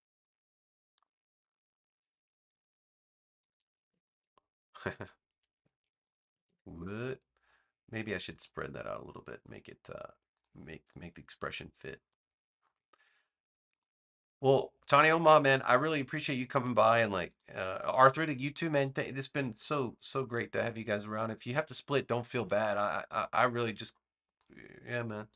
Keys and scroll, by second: 3.3 super+-, 5.9 super+=, 11.4 v.